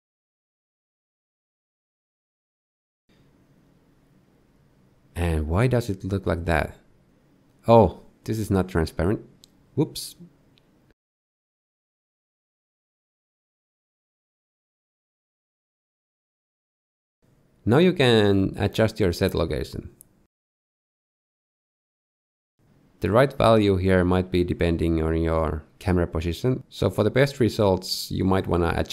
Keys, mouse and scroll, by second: 5.2 shift+middle click, 7.1 shift+middle click, 7.9 scroll down 1, 8.7 click, 9.9 x, 10.1 shift+a, 14.6 click, 16.1 middle click, 19.5 scroll up 2, 20.1 shift+middle click, 20.9 shift+click, 28.6 middle click.